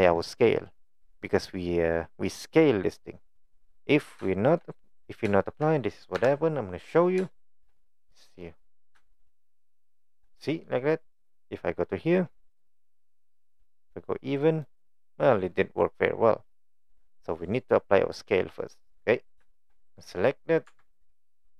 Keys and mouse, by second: 4.3 shift+middle click, 4.8 middle click, 5.4 shift+middle click, 6.2 KP_1, 7.3 shift+middle click, 7.7 shift+middle click, 8.4 middle click, 9.3 shift+middle click, 13.2 click, 13.4 click, 14.7 click, 16.5 click, 19.8 click, 20.7 Tab.